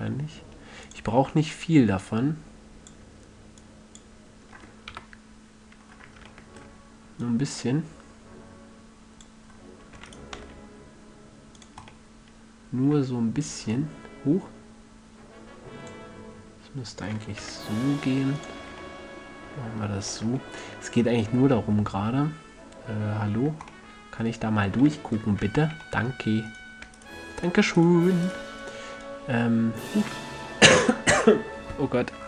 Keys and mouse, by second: 1.3-5.3 drag, 5.3 KP_3, 5.6 click, 7.6-9.5 drag, 10.3 e, 10.5 drag, 10.7 s, 12.0-12.3 drag, 12.3-13.1 middle drag, 15.7 middle click, 17.3 e, 18.8-19.4 drag, 18.9 a, 19.6-20.7 drag, 25.7 z, 29.1 right click, 29.4 click.